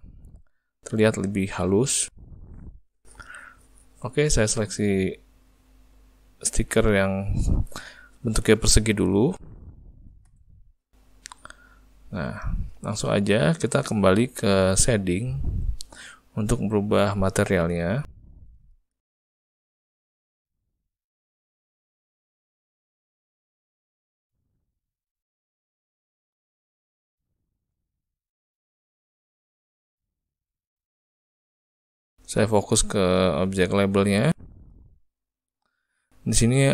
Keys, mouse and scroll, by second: 1.1 z, 6.5 middle click, 11.2 middle click, 13.1 ctrl+middle click, 13.5 shift+middle click.